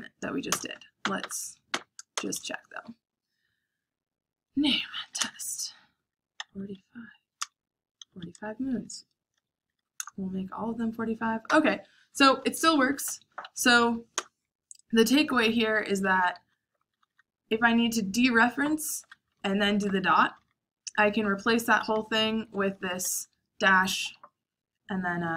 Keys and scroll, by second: 0.4 Return, 1.0 Up, 1.2 Up, 2.1 Return, 4.6-10.2 typing, 12.1 typing, 12.8 Up, 13.2 Up, 13.3 Up, 14.1 Return, 15.2-17.4 typing, 18.5-23.6 typing.